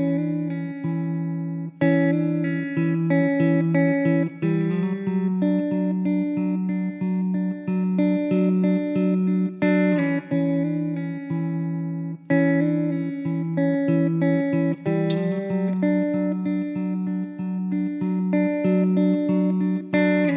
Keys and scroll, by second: 0.8 Tab, 2.9 ctrl+z, 3.3 Tab, 3.5 2, 4.0 f, 5.2 Tab, 8.3 Tab, 8.4 2, 12.2 ctrl+s, 12.8 shift+a, 14.0 Tab, 14.3 ctrl+z, 14.3 ctrl+z, 14.7 Tab, 15.7 shift+a.